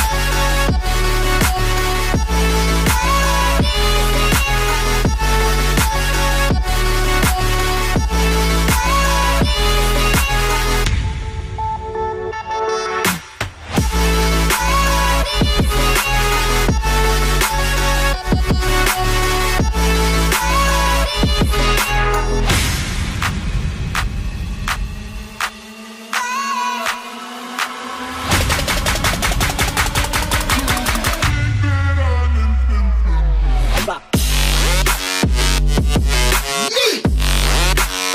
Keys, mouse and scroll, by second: 0.6 double click, 10.7 double click, 13.4 Delete, 14.3 Delete, 18.0 Delete, 18.1 alt+scroll down 1, 19.1 alt+scroll up 1, 19.7 alt+scroll up 1, 20.0 alt+scroll down 1.